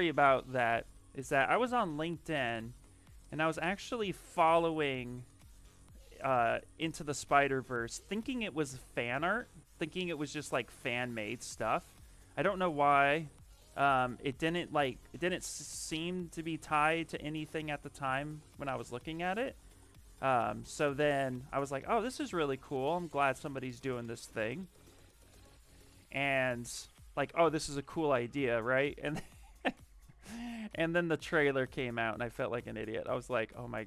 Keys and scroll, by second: 7.5 s, 12.6-13.7 typing, 31.3-32.4 typing.